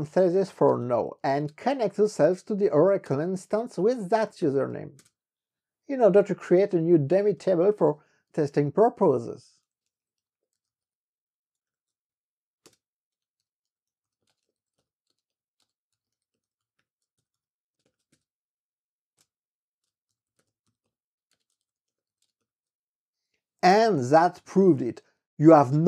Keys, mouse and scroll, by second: 0.6-5.3 typing, 6.7-18.7 typing, 12.8 Return, 19.3 Return, 20.0-23.3 typing, 23.8 Return.